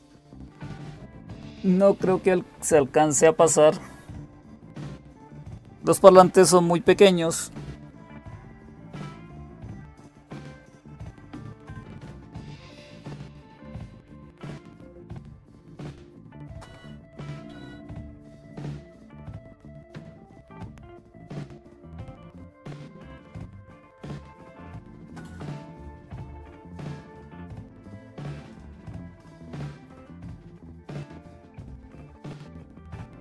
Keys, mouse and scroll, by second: 21.6-23.8 right drag, 23.8 click, 30.6 alt+super+Right, 31.2-31.6 alt+super+Right, 31.9 alt+super+Right.